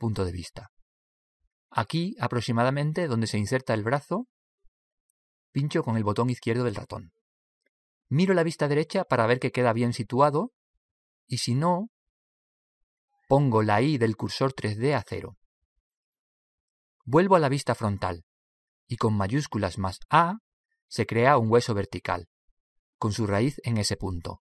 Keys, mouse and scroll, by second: 9.3 KP_3, 11.2 click, 13.7 click, 18.4 KP_1, 19.8 shift+a, 20.9 shift+a.